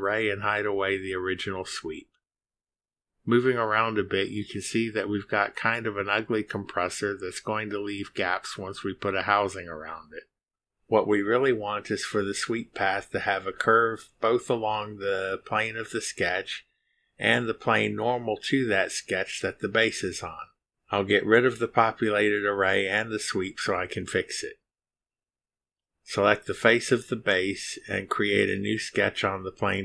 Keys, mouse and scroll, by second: 0.5 click, 1.7 click, 2.3 space, 4.1-4.8 drag, 4.6-7.0 scroll down 1, 7.0-9.2 drag, 9.5-10.9 drag, 21.0 click, 21.7 Delete, 22.9 click, 23.7 Delete, 27.3 click, 29.1 click.